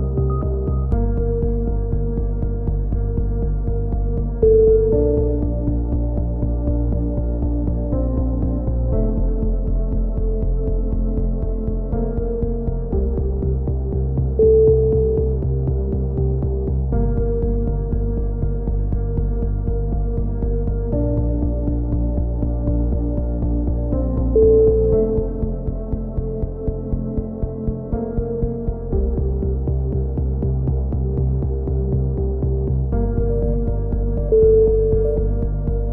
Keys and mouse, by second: 0.0-1.4 drag, 1.4 alt+r, 1.8 t, 3.3 click, 4.2 click, 5.9 click, 8.1-10.4 typing, 8.3 ctrl+z, 8.7 ctrl+z, 10.2 click, 14.9 click, 15.6 ctrl+KP_3, 16.3 click, 18.0 right click, 18.8 click, 19.7-21.7 right drag, 21.3 click, 23.0-24.7 drag, 23.0-24.7 right drag, 25.2 e, 25.7-28.0 drag, 27.2 a, 28.6 click, 28.7 Tab, 29.2 click, 29.2 h, 30.1 middle click, 30.3 Tab, 30.7 Tab, 30.7 click, 30.8 right click, 31.0 click, 33.3 right click, 34.0-35.3 drag, 35.8 click.